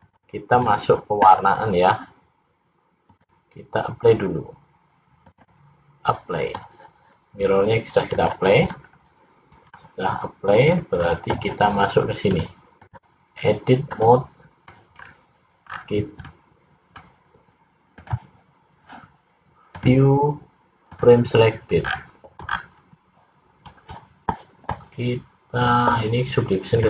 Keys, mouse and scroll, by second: 3.1 click, 8.2 click, 9.8 middle click, 9.8-10.3 scroll up 1, 12.3 click, 14.2 middle click, 15.1 scroll up 4, 15.8 scroll down 4, 16.4 middle click, 18.4 click, 19.9 click, 22.0-22.6 scroll down 3, 22.6 scroll down 4.